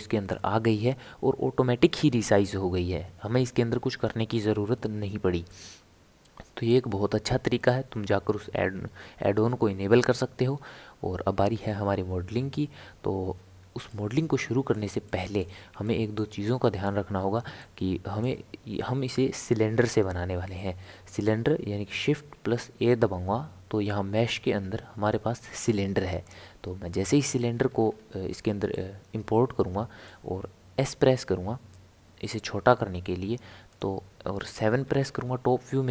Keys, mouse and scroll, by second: 5.5-8.5 middle drag, 13.9-20.7 shift+middle drag, 22.3 shift+a, 27.5 scroll down 1, 27.7 scroll up 1, 27.7-28.6 scroll down 4, 28.6 scroll down 1, 28.7-31.1 middle drag, 31.1 s, 34.8 KP_7.